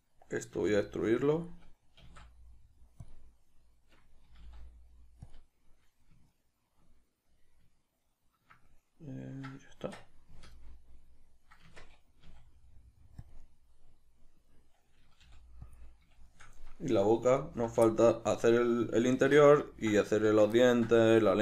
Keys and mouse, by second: 0.5 e, 1.5 click, 1.9 s, 3.1 click, 4.2 g, 5.3 click, 10.6-13.3 middle drag, 11.6 Tab, 13.3 click, 13.4-17.4 middle drag, 15.2 g, 15.8 click, 17.4 alt+right click, 17.8-21.4 shift+middle drag, 19.1 alt+q, 20.0 z.